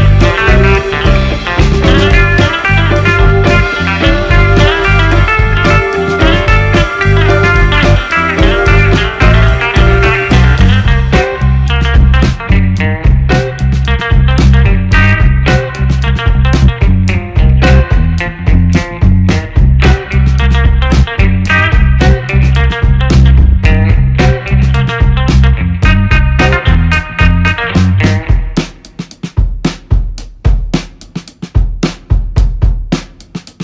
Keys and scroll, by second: 3.5 space, 5.4 space, 30.8 space.